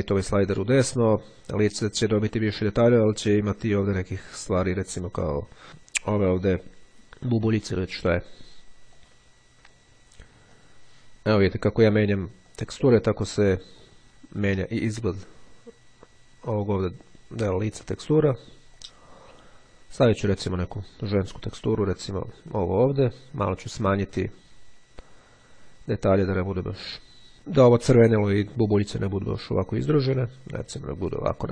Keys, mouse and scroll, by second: 5.3 scroll up 1, 9.1 click, 10.1-10.6 scroll down 1, 10.7 click, 12.5 click, 13.3-13.9 scroll down 1, 14.9 click, 18.7 click, 19.4-20.0 scroll up 1, 20.8-21.1 scroll down 1, 21.3-22.3 drag, 23.9-28.3 drag, 29.7-31.5 drag.